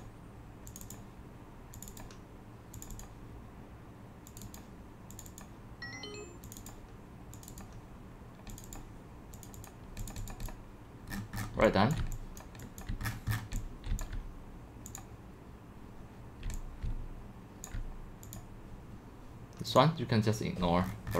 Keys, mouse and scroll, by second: 0.0-8.1 drag, 8.8 click, 9.6 click, 9.7 click, 10.4 click, 11.1-11.6 scroll down 12, 11.6-13.4 typing, 11.9 click, 12.4 click, 13.1 middle click, 13.1-13.6 scroll down 15, 14.0-15.8 drag, 16.2-18.0 typing, 17.7 click, 18.4-20.8 drag, 20.9-21.1 scroll.